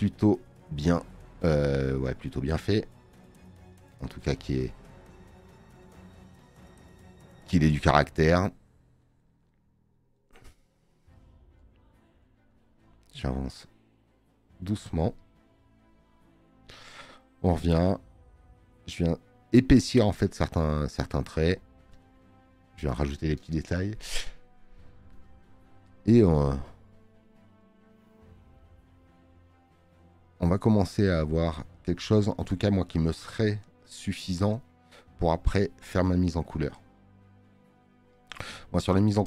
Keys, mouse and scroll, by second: 7.6 space, 7.8 click, 27.6 space, 27.7 click, 38.2 space, 38.2 click.